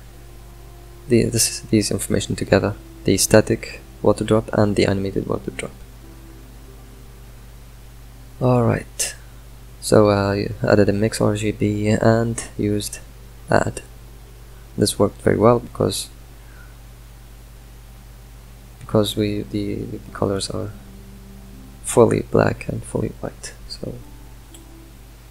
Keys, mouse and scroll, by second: 2.9 click, 6.1 ctrl+shift+drag, 10.9-14.7 drag, 16.2-17.5 drag, 21.7 Delete.